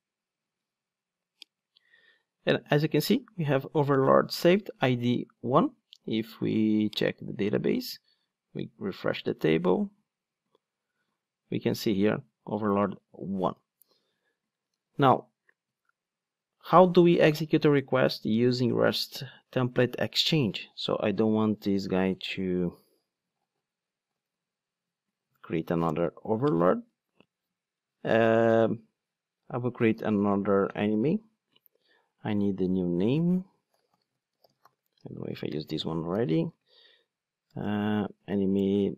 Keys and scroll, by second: 8.3 super+r, 14.8 ctrl+Tab, 24.0 super+/, 36.6 ctrl+space.